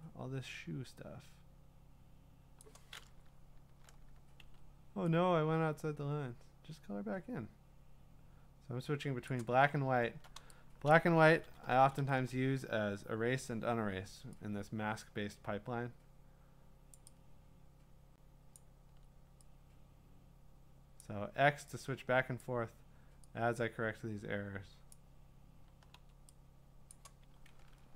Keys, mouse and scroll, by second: 2.6 click, 3.2-3.9 alt+scroll, 4.4 x, 9.4 click, 9.8-10.2 scroll, 10.9 click, 13.6 [, 16.9 click, 18.5 click, 18.9 x, 21.0 click, 22.4 click, 24.9 click, 25.9 x, 26.9 click, 27.8 scroll.